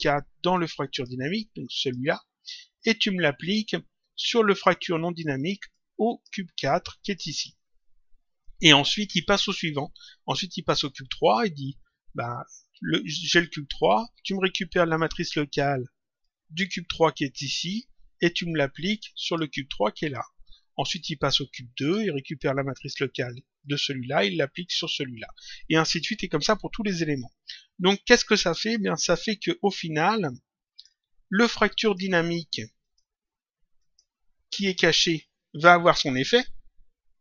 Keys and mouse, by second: 0.5 click, 1.7 click, 5.7 click, 6.9 click, 10.5 click, 16.1 click, 17.4 click, 18.8 click, 19.9 click, 21.7 click, 23.5 click, 28.5 click, 30.2 click, 31.8 click.